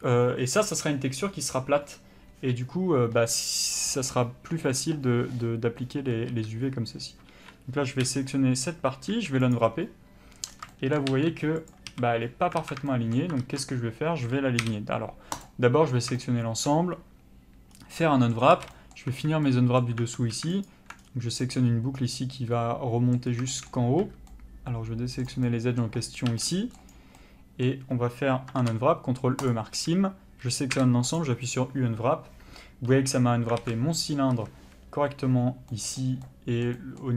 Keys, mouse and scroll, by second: 5.3-6.0 scroll up 1, 6.0 a, 7.3 3, 8.1 l, 9.6 u, 11.1 g, 11.9 a, 12.6 alt+a, 13.4 ctrl+z, 15.4 u, 17.7 scroll up 1, 17.9 middle click, 18.4 scroll up 1, 18.5 a, 18.7 middle click, 19.1 2, 19.4 middle click, 20.2 alt+a, 20.7 alt+click, 21.0-21.4 scroll down 1, 21.4 middle click, 23.8 scroll up 1, 24.3 c, 25.2 middle click, 26.4 c, 26.7 middle click, 29.5 ctrl+e, 29.7 a, 31.2 u, 33.6 alt+a, 34.3 a, 35.7 middle click.